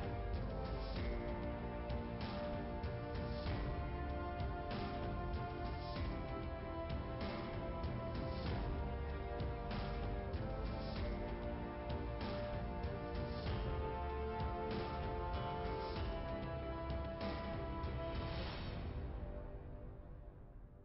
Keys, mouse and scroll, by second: 0.2 click, 1.2 click, 3.0 click, 3.7 click, 5.9 click, 7.3 click, 10.5 click, 11.9 click, 12.1 click, 13.0 click, 14.1 click, 15.2-16.0 typing, 16.5 Return, 17.9 click, 18.5 click, 19.5 5, 20.5 typing.